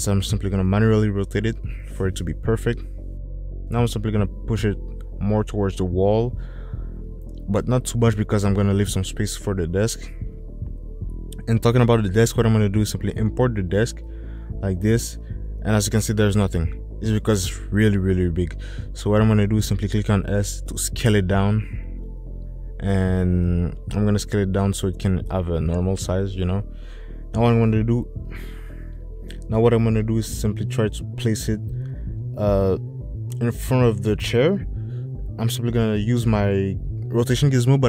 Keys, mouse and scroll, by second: 1.1-3.1 drag, 6.6 click, 21.6 s, 26.0 s, 31.7 click, 37.0 click.